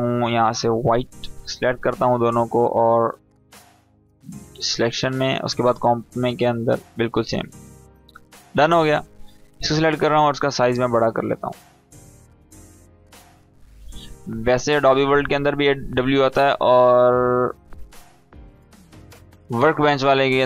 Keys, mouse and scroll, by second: 0.5-2.0 drag, 7.7 scroll down 1, 7.9 scroll up 1, 8.6-10.5 drag, 13.6-13.9 scroll down 1, 14.7-15.3 drag.